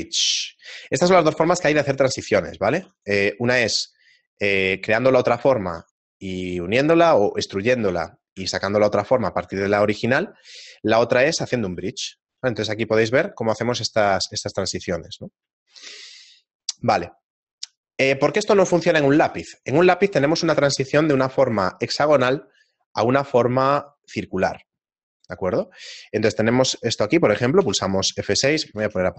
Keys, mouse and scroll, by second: 0.9 shift+middle click, 2.9 ctrl+r, 5.7 ctrl+r, 11.4 Tab, 12.2 shift+middle click, 13.1 middle click, 13.1 scroll down 1, 13.4 shift+middle click, 13.9 middle click, 14.4 shift+middle click, 15.1 middle click, 16.3 shift+middle click, 18.9 right click, 20.8 shift+a, 28.8 shift+space.